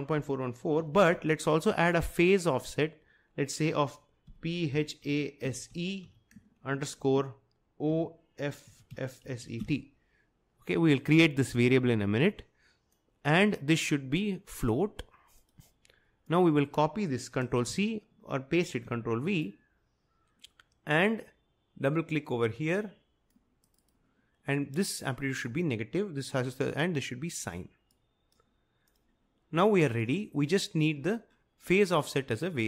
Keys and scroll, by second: 0.0-1.6 typing, 4.1-10.1 typing, 17.8 ctrl+c, 18.8 ctrl+v, 26.5 typing.